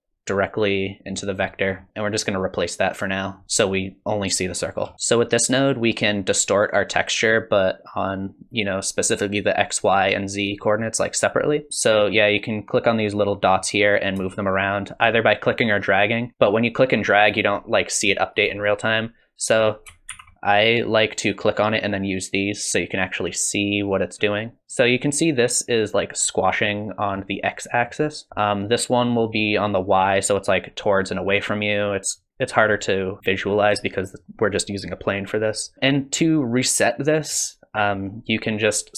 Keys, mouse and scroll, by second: 1.2 middle click, 1.7-2.2 scroll up 8, 1.9 middle click, 2.2 click, 4.9-6.8 scroll up 1, 11.9 click, 14.3 shift+click, 15.5 click, 20.1 ctrl+z, 21.8 click, 28.3 click, 29.1 click, 37.3 click.